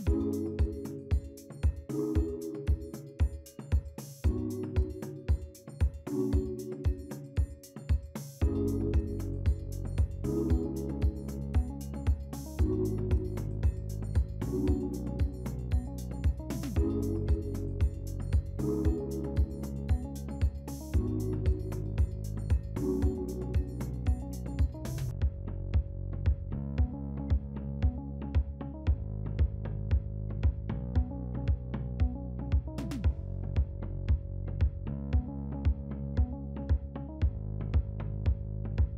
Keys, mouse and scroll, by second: 2.4-3.5 scroll up 3, 3.5 scroll down 2, 4.3-5.2 scroll down 1, 5.2-6.7 scroll up 1, 6.7-7.2 scroll up 3, 7.4 scroll down 2, 8.3 scroll down 2, 8.3-9.1 scroll up 3, 9.1 scroll down 1, 10.6 scroll down 2, 10.7-11.1 scroll up 3, 11.1 middle click, 11.8-12.1 scroll down 2, 13.0 scroll down 1, 13.1-13.4 scroll up 2, 29.1-38.9 scroll down 1.